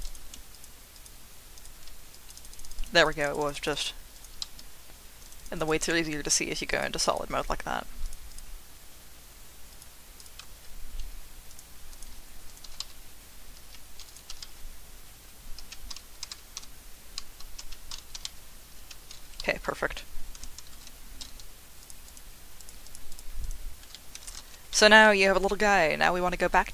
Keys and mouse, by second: 0.0 click, 0.5 ctrl+click, 1.0 ctrl+click, 2.1 click, 2.3 click, 2.5 click, 2.7 click, 2.9 click, 3.2 click, 3.5 click, 3.7 click, 4.2 click, 4.4 z, 5.2 click, 5.4 click, 5.5 click, 6.8 click, 8.4-9.5 drag, 10.4 z, 11.5 click, 12.6 r, 12.8 z, 13.6 Escape, 14.1 click, 14.3 r, 14.5 z, 14.5 x, 15.6 Escape, 16.3-18.2 typing, 17.6 Escape, 18.7 Escape, 19.4 z, 20.7 ctrl+s, 21.9 click, 22.6 click, 23.4 click, 23.9 middle drag, 24.4 ctrl+s, 24.7-25.2 middle drag.